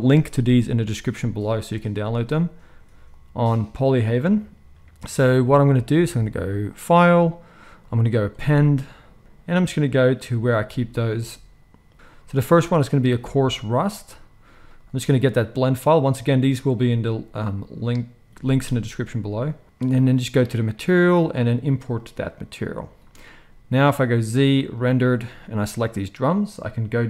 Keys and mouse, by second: 3.0-25.7 drag, 24.1 z, 25.7-27.0 middle drag.